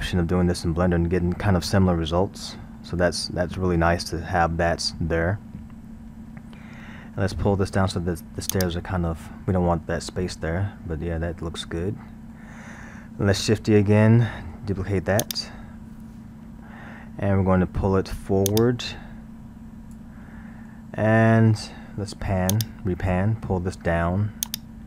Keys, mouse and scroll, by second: 0.9-8.3 middle drag, 8.5-10.3 drag, 10.3-13.3 middle drag, 15.0 shift+d, 16.9-18.5 middle drag, 18.5-20.4 drag, 20.4-22.5 middle drag, 22.5-24.8 drag.